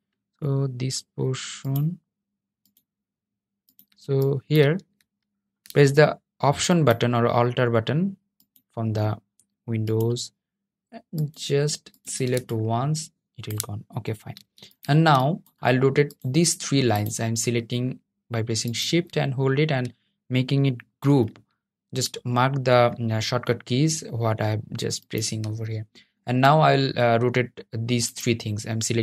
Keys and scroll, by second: 20.1 super+g.